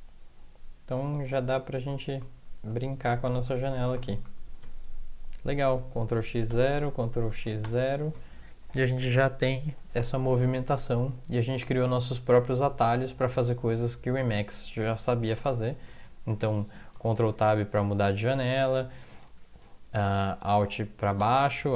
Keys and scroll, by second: 1.9 alt+Left, 2.2 alt+Right, 2.7 alt+Right, 3.2-4.0 alt+Right, 4.6 Home, 6.0 ctrl+x, 6.5 0, 7.3 ctrl+x, 7.6 0, 8.7 Down, 8.9 Down, 9.0-9.8 Down, 9.8 Up, 10.3 Up, 11.0-11.8 Down, 12.3 Up, 12.5 Up, 12.6 Up, 12.8 Up, 13.0 Up, 13.1 Up, 13.3 Up, 17.1 ctrl+Tab, 18.5 Down.